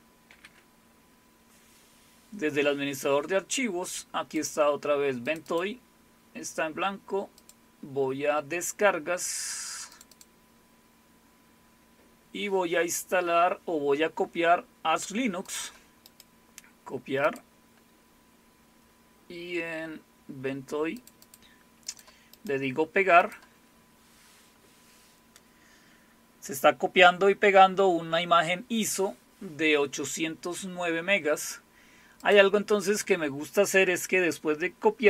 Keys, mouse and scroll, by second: 0.3 alt+super+f, 4.3 click, 5.2 click, 7.4 click, 9.9 click, 10.1 click, 15.4 click, 17.2 click, 21.0 click, 21.2 click, 21.9 click, 23.2 click, 32.3 click.